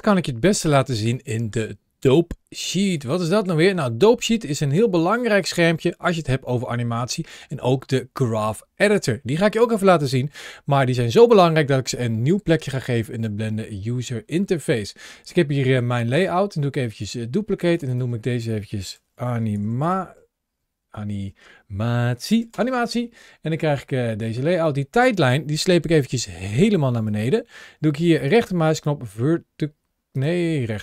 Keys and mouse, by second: 2.8-13.1 drag, 15.8-17.0 right drag, 17.6 click, 17.9-22.4 drag, 20.9 BackSpace, 24.5-26.9 drag, 28.1-30.0 right drag.